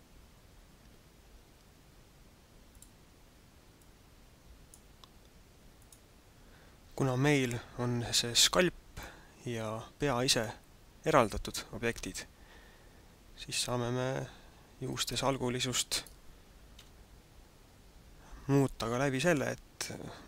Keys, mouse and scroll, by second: 2.7 click, 3.7 click, 5.7 click, 13.2-13.6 scroll up 2, 15.1 right click, 15.9 right click, 16.8 KP_Divide, 19.5 middle click.